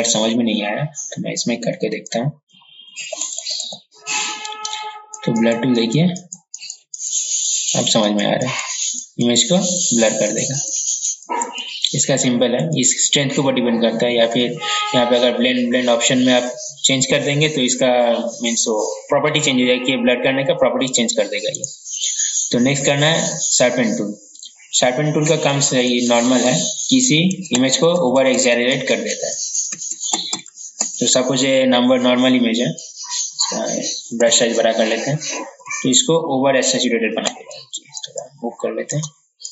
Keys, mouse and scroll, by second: 5.2-9.8 drag, 21.6-22.7 right drag, 23.2 click, 25.4 ctrl+z, 25.6 ctrl+z, 25.9 ctrl+z, 26.1 ctrl+z, 26.2 ctrl+z, 26.4 ctrl+z, 26.7 ctrl+z, 27.0 ctrl+z, 27.6 ctrl+z, 28.5 ctrl+z, 29.8 ctrl+z, 37.6-39.5 drag.